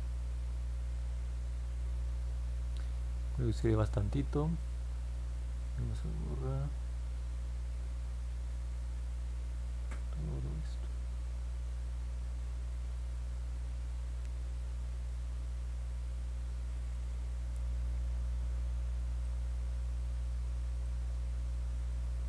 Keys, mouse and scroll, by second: 5.7-17.3 drag, 18.3 middle click, 18.6 middle click, 19.2-20.8 alt+drag, 21.7 alt+middle click.